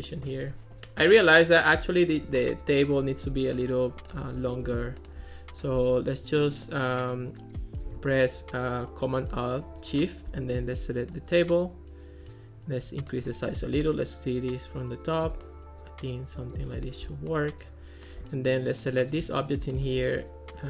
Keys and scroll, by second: 5.8 Escape.